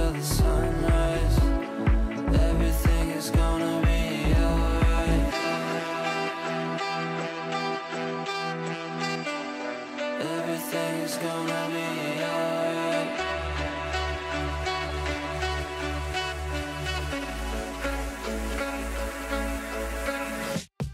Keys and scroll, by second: 19.9 Return.